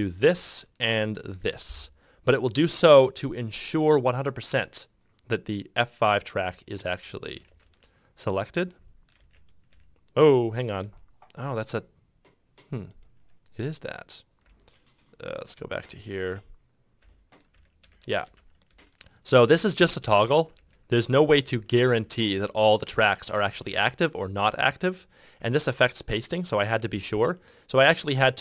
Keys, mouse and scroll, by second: 0.3 shift+9, 1.5 shift+5, 6.7 shift+5, 9.3 shift+0, 17.7 shift+9, 18.0 shift+9, 19.7 shift+9, 20.2 shift+9, 20.7 shift+9, 21.9 shift+9, 23.8 shift+9, 24.6 shift+9, 25.7 shift+9, 27.3 shift+9.